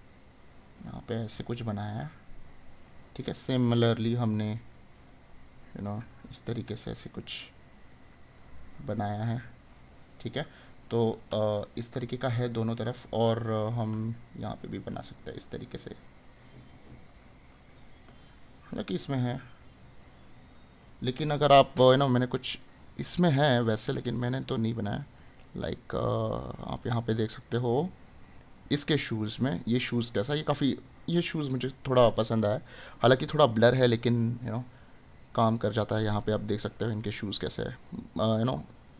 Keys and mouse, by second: 1.6 right click, 7.4 right click, 9.3 right click, 13.6 right click, 16.1 right click, 19.1 right click.